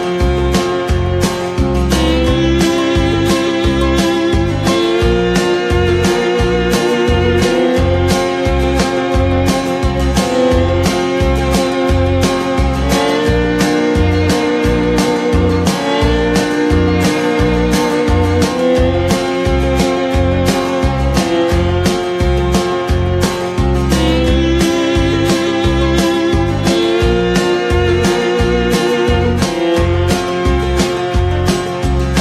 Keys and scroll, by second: 5.1 ctrl+c, 5.3 ctrl+v, 12.1 ctrl+[, 19.3 ctrl+-, 21.1 ctrl+=.